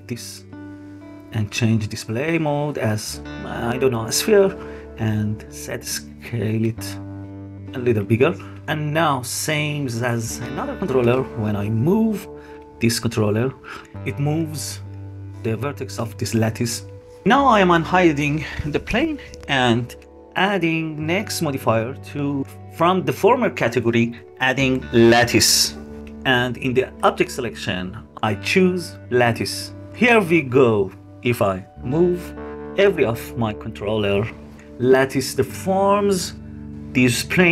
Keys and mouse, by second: 1.3-2.0 drag, 2.0-3.8 middle drag, 5.3 middle click, 6.6-8.0 middle drag, 8.0 click, 10.8 g, 16.9-17.6 middle drag, 18.7 middle click, 23.1 middle click, 23.7-25.7 middle drag, 27.5-29.4 middle drag, 30.0 middle click, 32.2 g.